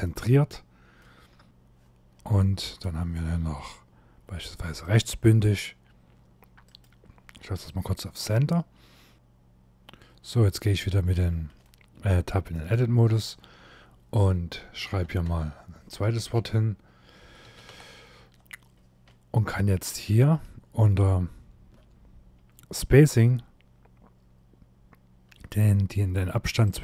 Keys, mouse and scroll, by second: 0.2 scroll up 2, 0.7 middle click, 1.4 middle click, 2.2 click, 6.3 click, 8.0-9.1 scroll down 1, 10.1 Tab, 11.3 shift+middle click, 12.9 space, 14.5 1, 14.7 2, 14.9 3, 15.8 space, 16.9 w, 17.2 e, 17.4 r, 17.9 Tab, 18.4 scroll down 2, 19.0 shift+middle click, 20.3 scroll down 2, 26.3 click.